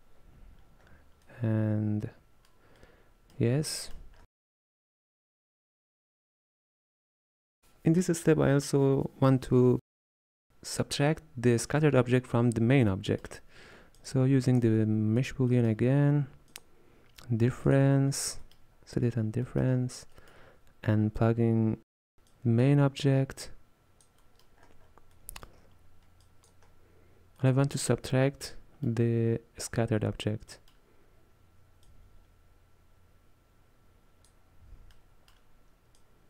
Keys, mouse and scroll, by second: 3.7 scroll down 1, 3.9-4.2 middle drag, 4.2-5.0 scroll up 7, 5.0 click, 6.1-7.6 middle drag, 13.1-14.1 middle drag, 14.1 click, 14.8 shift+d, 15.6-16.6 middle drag, 16.6-18.2 drag, 18.2-18.5 scroll up 1, 18.5 middle drag, 18.8-19.5 scroll up 2, 19.5 middle drag, 19.8-20.2 scroll down 10, 20.2-21.6 middle drag, 22.4 click, 24.3-24.7 middle drag, 24.7-25.2 scroll up 9, 25.2-26.3 middle drag, 26.3 click, 26.7-27.5 scroll down 3, 27.5 middle click, 28.2-28.5 scroll down 1, 28.5-31.9 middle drag, 31.9 drag, 35.0-36.0 middle drag, 36.0 click.